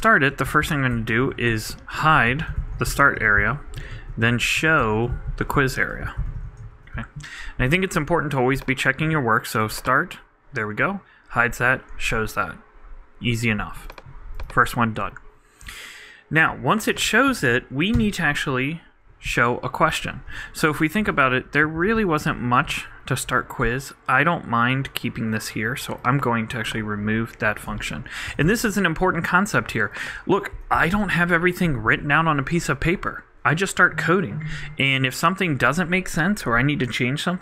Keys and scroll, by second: 0.1-1.1 typing, 1.7 super+t, 1.8 super+Right, 2.3 super+., 2.8-5.1 typing, 5.5 super+z, 5.6 super+Right, 6.4-7.4 typing, 20.2 super+z, 21.7 shift+super+Left, 21.9 shift+super+Up.